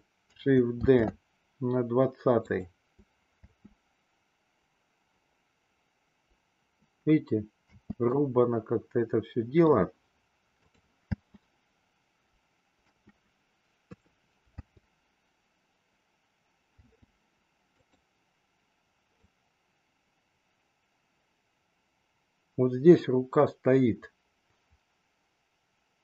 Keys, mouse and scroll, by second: 0.8 shift+d, 3.3 space, 7.7 space, 8.2-9.7 middle drag, 10.6 click, 10.9 space, 12.9 space, 13.6 middle click, 13.7 KP_3, 14.4 space, 16.8 space, 17.7 click, 19.2-26.0 drag.